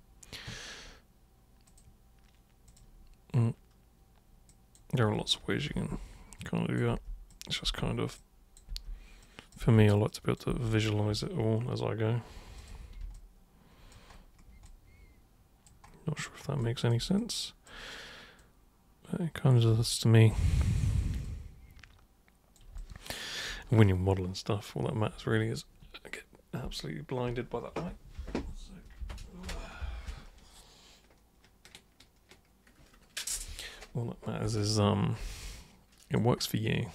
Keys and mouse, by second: 1.7 super+click, 2.7 super+click, 4.5 super+drag, 5.8 super+g, 6.4-6.8 super+drag, 6.9 super+g, 7.3 super+click, 7.7 super+g, 8.2-8.6 super+drag, 8.7 super+g, 9.2 super+drag, 9.6 super+g, 10.1 super+drag, 10.5 super+g, 12.6 super+click, 13.1 alt+super+click, 14.6-15.7 alt+super+drag, 16.6 alt+super+click, 17.2-17.7 super+drag, 18.4 super+click, 19.9-20.3 alt+super+drag, 21.2-22.6 super+drag, 22.8-23.4 alt+super+drag, 35.3 alt+super+click.